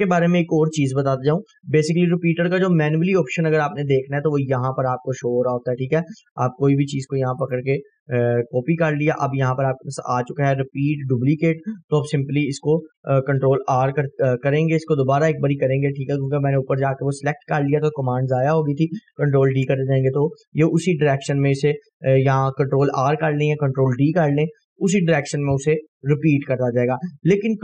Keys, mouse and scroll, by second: 0.4 scroll up 1, 3.4 click, 7.6 right click, 9.0 click, 12.6 click, 13.7 ctrl+r, 14.9-16.5 click, 16.2 right click, 19.2 ctrl+d, 20.9-21.5 drag, 25.8 Delete, 27.0 click, 27.5 scroll up 1.